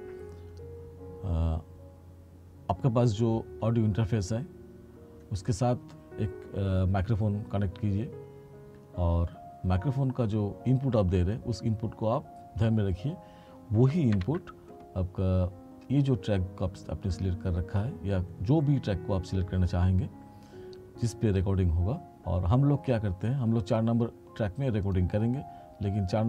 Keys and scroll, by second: 14.2 ctrl+=.